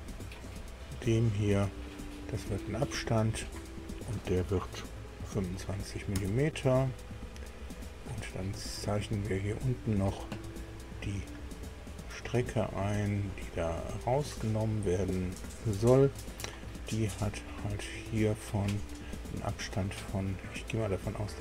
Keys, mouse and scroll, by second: 0.1 click, 3.1 click, 5.2 KP_2, 5.5 KP_5, 6.1 KP_Enter, 9.6 click, 10.7 scroll up 2, 12.0 click, 13.7 click, 14.1 click, 17.7 click, 18.9 click.